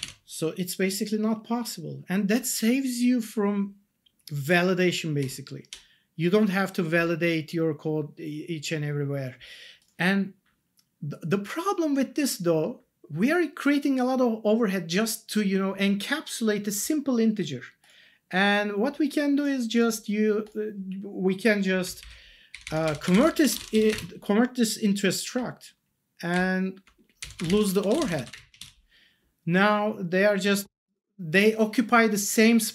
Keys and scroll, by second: 0.0 ctrl+s, 5.2 Up, 21.8 Down, 22.5 Up, 23.3-24.3 typing, 25.3 Down, 26.3 Up, 27.2 Left, 27.7-28.7 typing.